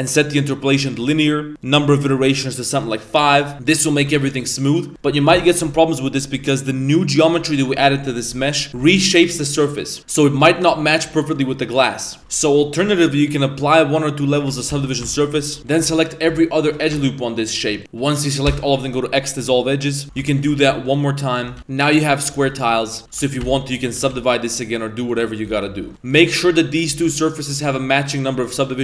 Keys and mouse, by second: 1.7-2.8 drag, 3.3 middle drag, 3.5 Tab, 3.6 middle drag, 4.0 a, 4.2-4.9 middle drag, 4.9 Tab, 6.2 Tab, 8.3 middle click, 8.7 Tab, 9.2 g, 10.5 shift+right click, 11.2 middle drag, 11.5 Tab, 11.9 middle click, 12.2 Tab, 12.2 shift+middle click, 12.2 a, 12.3 middle click, 13.3 click, 14.8 ctrl+a, 15.0 Tab, 15.4 shift+middle click, 15.6 ctrl+z, 15.6 a, 15.6 alt+right click, 16.1 alt+shift+right click, 16.5 alt+shift+right click, 18.4 x, 19.7 middle click, 20.0 2, 20.3 alt+shift+right drag, 21.6 x, 22.1 middle drag, 22.3 Tab, 22.7 middle click, 23.0 middle click, 23.4 ctrl+1, 23.8 middle click, 23.9 a, 24.2 middle click, 24.7 right click, 25.1 right click, 25.5 ctrl+2, 25.8 ctrl+3, 25.9 a, 25.9 middle drag, 26.3 shift+right click, 26.5 Tab, 26.9 2, 27.5 Tab, 27.7 right click, 28.1 right click, 28.6 middle drag.